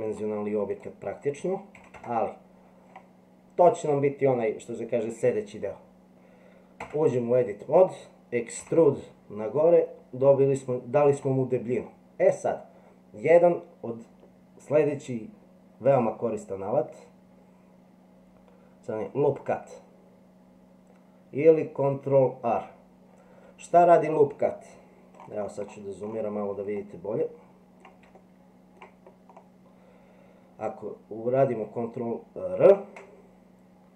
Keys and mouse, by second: 0.1 click, 0.7-2.6 drag, 6.8 Tab, 8.6 e, 26.8-28.0 middle drag, 28.2 shift+middle click, 32.6 ctrl+r.